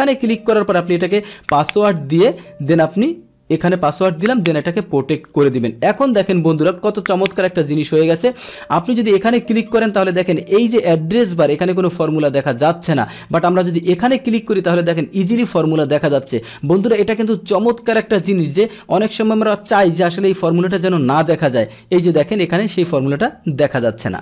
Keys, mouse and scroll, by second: 0.0-0.7 drag, 2.3 click, 3.9 click, 6.0 click, 6.5-7.5 drag, 7.7 click, 8.2 click, 8.8 click, 13.7 click, 17.2-19.1 drag, 20.2 click, 21.6 click, 22.0 click, 22.4 click.